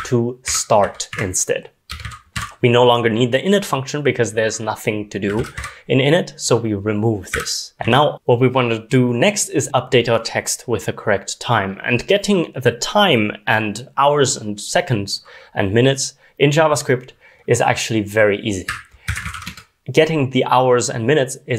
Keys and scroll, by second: 0.0-2.5 typing, 5.3-6.0 typing, 8.1 ctrl+r, 8.1 ctrl+s, 18.4-19.8 typing.